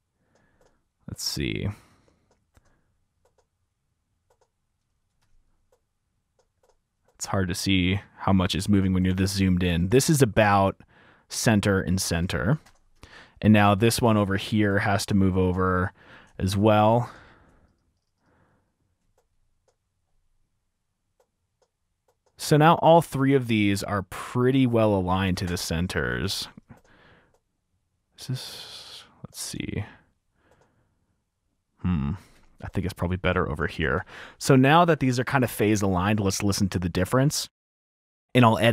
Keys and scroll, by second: 1.4 super+4, 2.8 F7, 5.4 F7, 5.9 super+4, 9.2 F7, 12.2 F7, 12.5 super+4, 14.2 F7, 15.4 super+4, 17.2 t, 25.6 super+4, 26.4 F7, 28.6 super+4, 32.6 F7, 32.9 super+4, 34.4 F7, 34.5 F7, 34.7 F7, 34.9 F7, 35.1 F7, 35.3-35.7 typing, 37.1-37.8 typing.